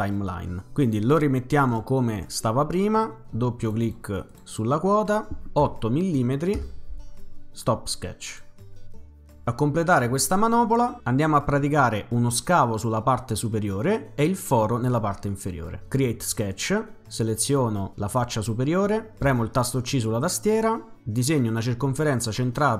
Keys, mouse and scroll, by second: 1.5 click, 1.7 click, 3.6 click, 3.8 click, 4.3 click, 4.5 click, 5.6 8, 6.6 Return, 8.3 click, 9.6 middle click, 9.6-10.1 scroll up 2, 15.9 click, 18.1 click, 19.3 c.